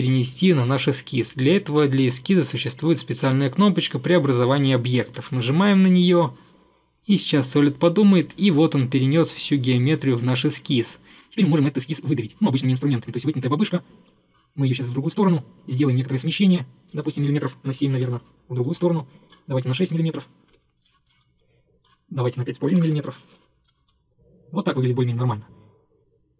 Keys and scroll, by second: 17.7 7, 18.0 Return, 20.5 6, 22.5-23.5 typing.